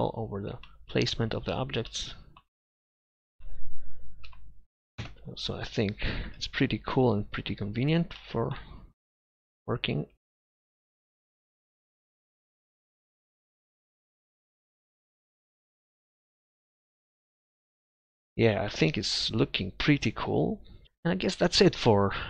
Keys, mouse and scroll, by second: 0.0 KP_Divide, 4.3 KP_5, 5.0 KP_0, 6.3 z, 9.3 KP_3, 10.1 KP_1, 10.2 KP_5, 10.4 z, 11.6 ctrl+z.